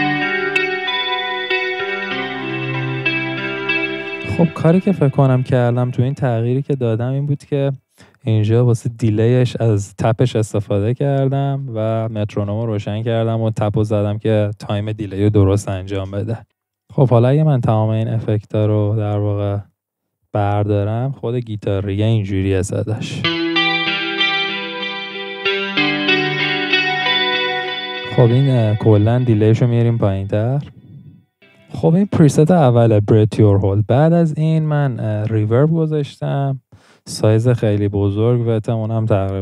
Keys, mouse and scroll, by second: 31.4-31.9 middle drag.